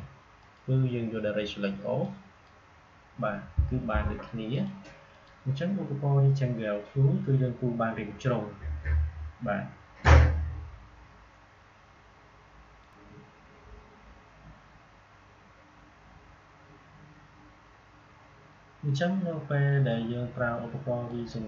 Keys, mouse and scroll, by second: 12.7 click, 19.8-21.4 drag.